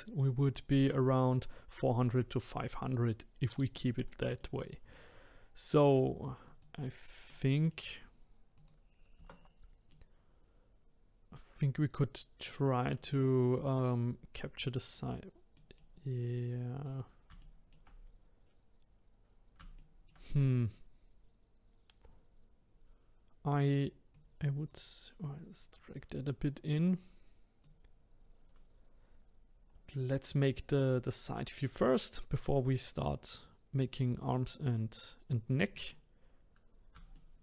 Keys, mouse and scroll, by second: 4.4-6.4 middle drag, 6.4 click, 7.3-8.5 middle drag, 8.5 click, 9.9-16.7 middle drag, 16.7 click, 17.4 shift+middle click, 18.0-19.8 scroll up 2, 19.8 shift+middle click, 20.3-20.6 scroll up 2, 24.1 click, 25.4 click, 29.5-32.6 scroll down 2, 32.6-34.1 scroll down 1, 34.1-35.7 scroll down 1, 35.7 click, 37.1 shift+middle click.